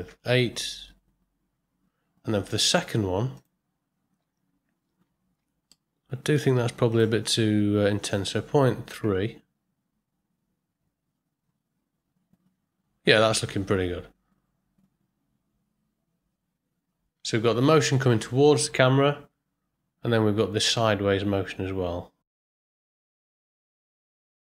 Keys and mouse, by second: 3.4 click, 5.7 middle click, 6.9-13.8 drag, 23.6 space.